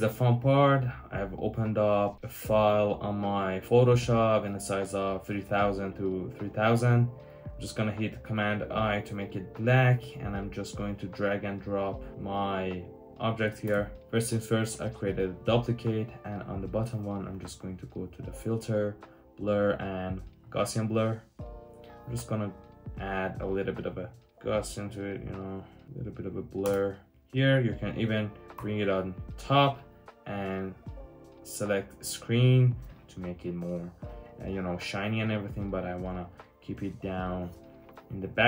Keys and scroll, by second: 0.9 typing, 8.2 super+i, 13.6 Return, 26.5 Return, 28.5 super+], 36.7 super+[.